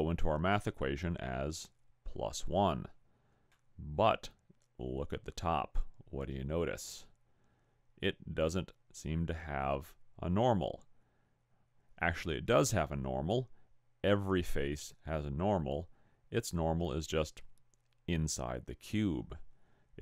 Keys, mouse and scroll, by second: 3.7 middle click.